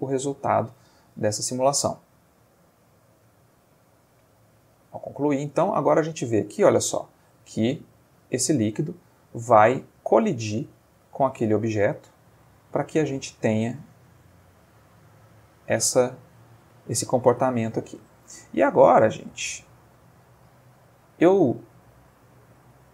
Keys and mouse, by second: 5.5 space, 6.8-7.5 middle drag, 9.2-9.9 middle drag, 13.9-15.1 middle drag, 16.0-16.8 middle drag, 17.1-18.5 ctrl+middle drag, 18.6-19.0 ctrl+shift+middle drag, 19.1-19.7 ctrl+middle drag, 19.6 Escape, 21.1-22.9 drag.